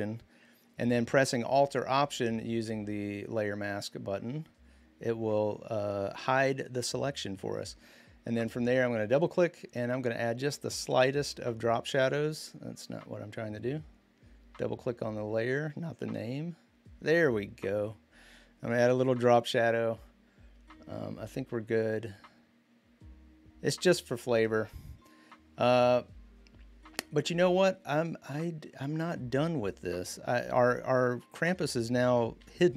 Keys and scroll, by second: 32.2 v.